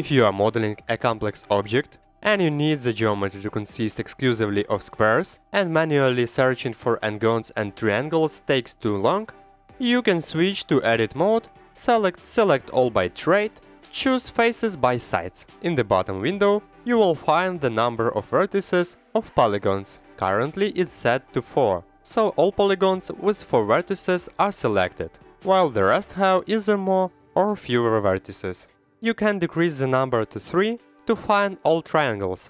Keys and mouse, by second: 2.4-5.1 drag, 2.4-5.1 middle drag, 6.9 click, 6.9 middle click, 7.6 Tab, 8.4 middle click, 9.7-15.5 drag, 18.2 middle click, 29.5 click, 30.4 click, 30.4 right click, 31.8-32.4 middle drag.